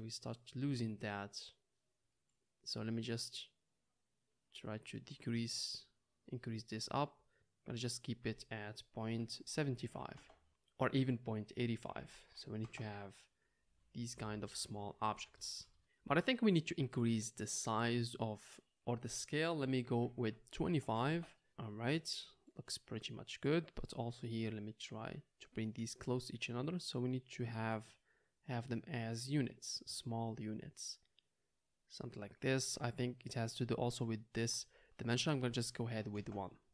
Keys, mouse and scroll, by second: 0.1 click, 0.1 right click, 2.8-3.8 drag, 2.8-3.8 right drag, 5.0-7.6 drag, 7.6 middle click, 8.2-21.9 drag, 21.1 Return, 21.9-24.7 middle drag, 24.7-26.5 drag, 26.5-28.9 middle drag, 28.9-36.7 drag.